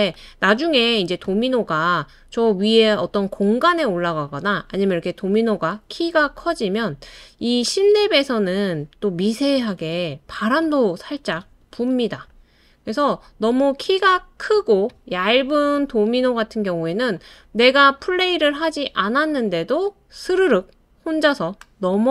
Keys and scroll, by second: 9.8 super+d, 11.5 super+d, 11.8 super+d.